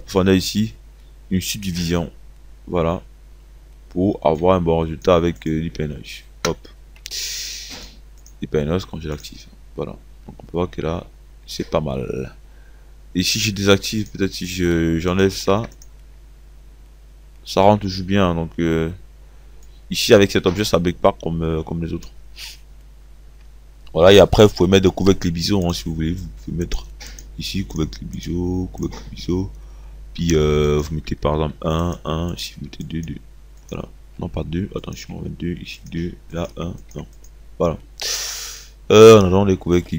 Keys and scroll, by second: 6.3 Delete, 15.7 0, 32.3 1.